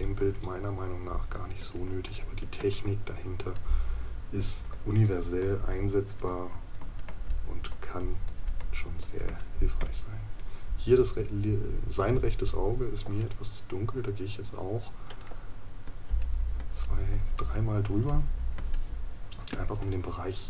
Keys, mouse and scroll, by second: 13.2 right click.